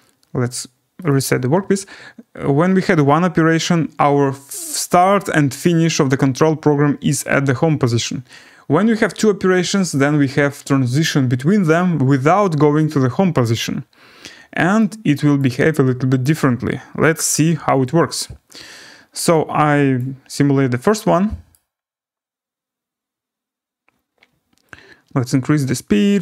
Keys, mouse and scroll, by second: 1.1 click, 3.0-3.7 scroll down 3, 5.6-5.9 scroll, 8.0-10.8 scroll, 15.3 click, 17.1 click, 19.9 click, 20.3 scroll, 21.5 right click, 21.7-22.9 scroll.